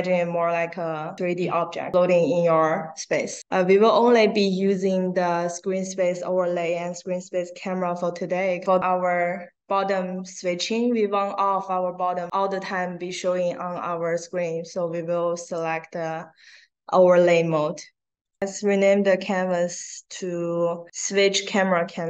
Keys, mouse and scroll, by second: 8.6 click, 15.4 click, 19.4 click, 20.1 click, 20.8-22.0 drag.